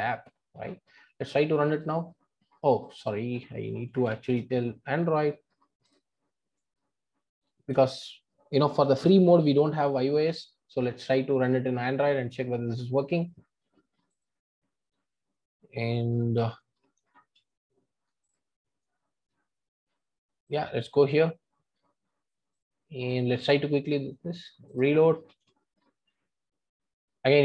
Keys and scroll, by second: 1.8 ctrl+r, 5.9 super+F2, 11.4 ctrl+r.